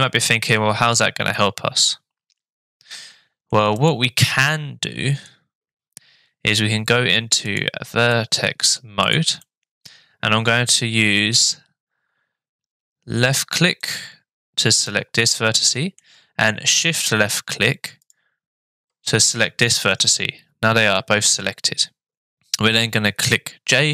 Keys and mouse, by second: 1.3-3.5 middle drag, 3.7 click, 4.3 middle click, 7.5 click, 8.1 middle click, 9.0 click, 9.4 middle click, 15.3 middle click, 18.0 shift+click.